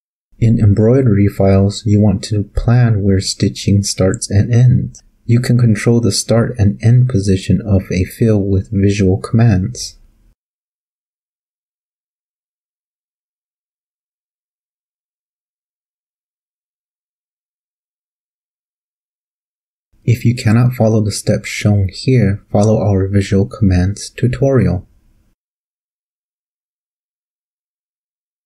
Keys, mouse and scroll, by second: 1.0 click, 5.9 click, 7.5-7.8 drag, 8.0-8.3 drag, 8.5-8.8 drag, 9.5 click, 11.2 click, 13.0 click, 14.1-15.3 drag, 15.5 click, 16.1 click, 17.1 click, 17.9-18.5 drag, 18.8 click, 19.6 click, 20.4 click, 20.6 click, 21.4 ctrl+shift+click, 22.1 ctrl+shift+l, 23.6 Up.